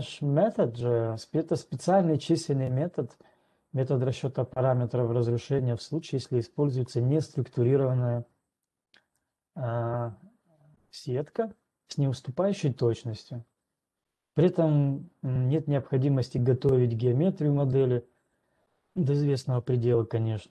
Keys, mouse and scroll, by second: 9.1 right click, 9.1-12.8 scroll.